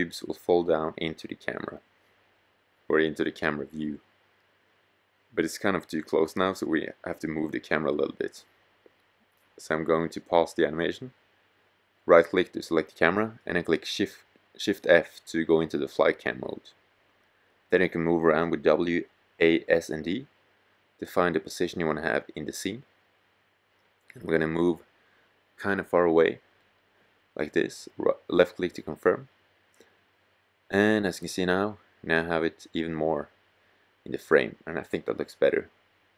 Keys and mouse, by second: 10.1-13.5 drag, 13.2 shift+f, 17.0 middle click, 18.8 middle click, 21.3 middle click, 27.9-28.4 drag, 33.8-36.1 drag.